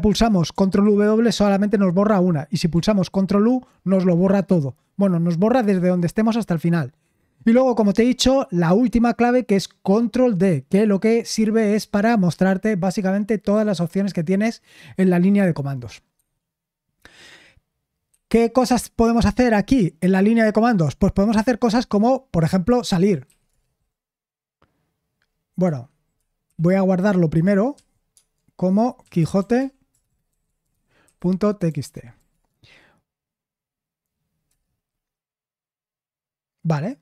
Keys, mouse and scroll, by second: 0.8 ctrl+w, 3.1 ctrl+u, 13.5 ctrl+d, 22.8-23.8 typing, 26.4 shift+;, 29.3-32.6 typing.